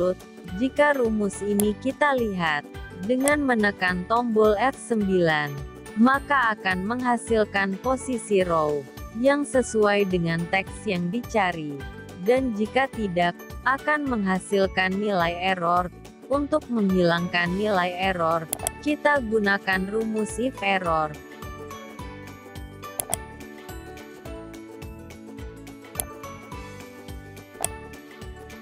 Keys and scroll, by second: 4.0 F9, 15.8 ctrl+z.